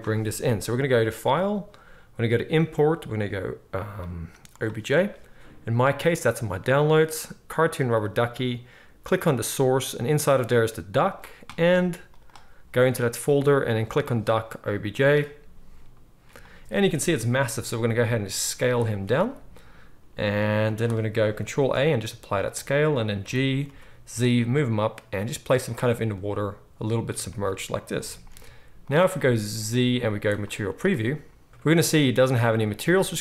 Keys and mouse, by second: 1.3-15.6 drag, 1.3-7.1 middle drag, 15.6-18.6 middle drag, 17.5 s, 18.6-33.2 drag, 19.1 s, 21.5 ctrl+a, 23.2 g, 28.0 g, 29.8 z.